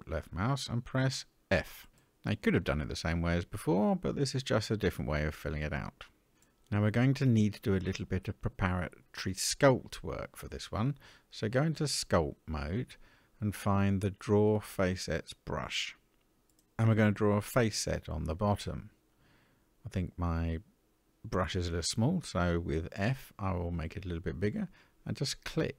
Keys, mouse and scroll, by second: 1.0 f, 5.0 click, 6.4-9.2 middle drag, 11.3-12.5 drag, 13.6-16.4 scroll down 8, 18.6 click, 19.6 middle click, 21.5 click, 22.5 click, 23.9 f, 25.3 click.